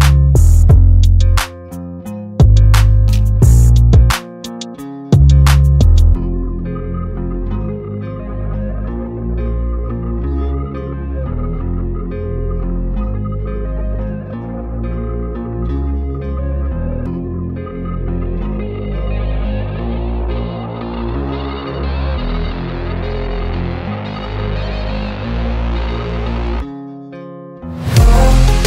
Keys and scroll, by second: 0.3 m, 1.9 Return, 2.2 space, 3.0 p, 5.8 space, 9.1 Return, 9.8 p, 10.8 Return, 11.9 p, 13.8 space, 19.3 space, 20.5 p, 21.7 Return, 23.4 m, 24.9 Return, 25.5 p, 26.5 Return.